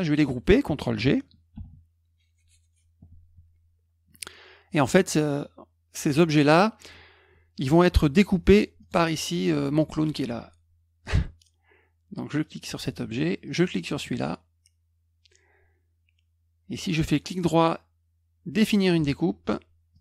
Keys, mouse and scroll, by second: 1.5 ctrl+g, 8.8 click, 12.4 click, 13.4 shift+click, 17.0 right click, 18.7 click, 19.9 click.